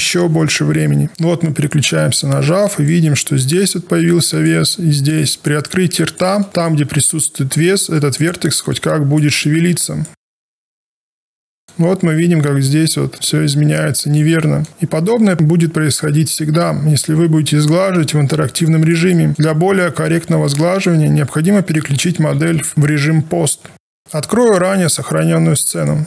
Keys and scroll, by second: 9.4 w, 10.1 e, 20.0 q, 23.4 ctrl+a, 23.7 Return.